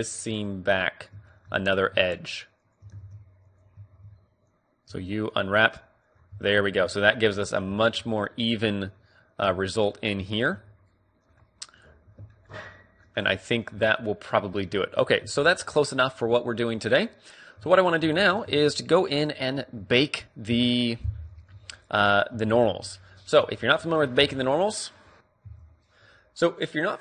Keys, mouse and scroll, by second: 0.5-3.7 middle drag, 2.4-3.7 drag, 3.1 ctrl+e, 3.7 right click, 3.9 click, 3.9 a, 4.2 a, 5.0 u, 6.2 middle click, 6.4 Tab, 9.6 Tab, 10.7 a, 12.0-14.0 middle drag, 14.5 a, 15.1 KP_1, 15.4 Tab, 17.8 Tab, 18.3 middle click, 18.6 Tab, 20.7 KP_Divide, 21.4 middle click, 21.7 z, 22.6 z, 23.8 middle click.